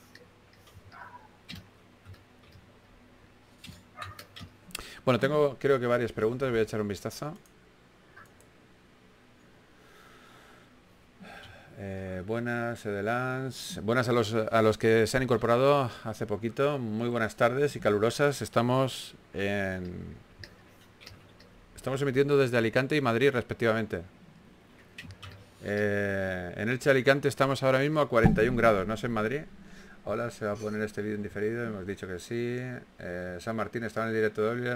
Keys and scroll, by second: 2.8 s, 6.8-7.8 typing, 11.8 typing, 17.1 4, 19.5 s, 21.6 s, 27.1 s, 28.9-29.5 typing, 30.6-32.7 typing, 34.5 typing.